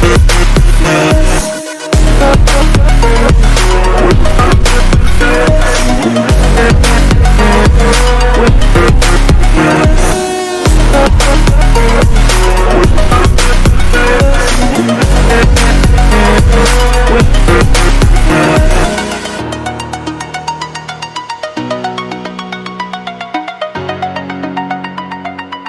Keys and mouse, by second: 0.1 Right, 0.4 Right, 2.4 click, 3.9 click, 4.8 click, 6.2 click, 6.9 Return, 8.2 click, 9.8 Up, 11.9 right click, 13.2 click, 14.0 click, 14.9 Right, 15.2-16.9 Right.